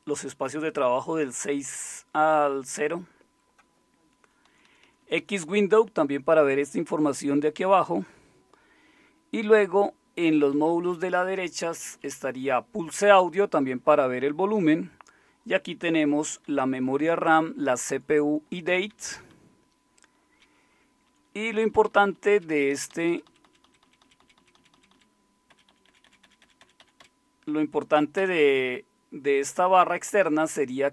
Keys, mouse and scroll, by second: 4.5 Right, 4.6 Right, 4.8 Right, 5.0 Right, 5.2 Right, 5.5 Right, 9.6 Right, 10.2 Right, 10.5 Down, 11.6 Left, 11.7 Left, 11.9 Left, 12.1 Left, 16.1 Right, 16.3 Right, 16.4 Right, 17.1-18.4 Right, 18.9 Down, 19.1 Down, 19.3-21.3 Down, 21.9 Down, 21.9 Down, 22.1-23.2 Down, 23.8 Down, 24.0 Down, 24.2 Down, 24.7 Down, 25.5 Up, 25.7 Up, 25.8 Up, 26.0 Up, 26.2 Up, 26.4 Up, 26.6 Up, 28.2 Down.